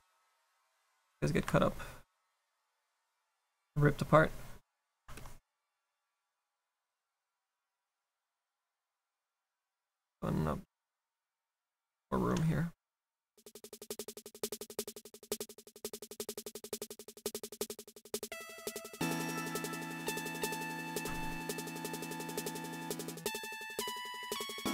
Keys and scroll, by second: 10.6 s.